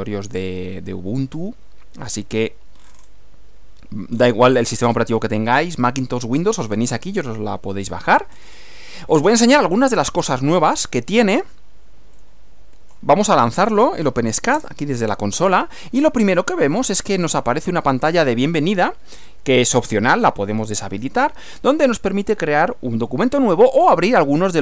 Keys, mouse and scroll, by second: 2.7-3.2 scroll up 2, 4.1 scroll down 2, 4.7-5.1 scroll up 2, 6.6-6.9 scroll down 2, 8.3-10.6 scroll up 2, 12.2 click, 13.3 click, 14.2 Up, 14.5 Return, 16.7-18.1 drag.